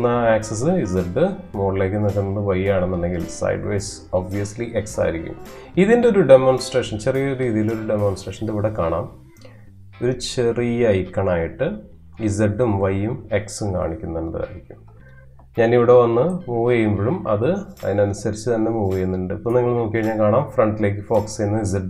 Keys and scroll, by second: 14.6 space.